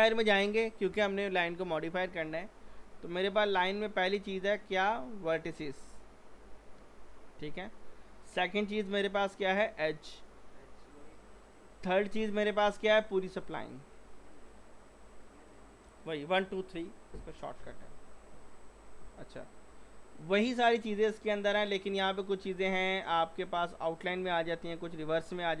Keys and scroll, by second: 6.8 w.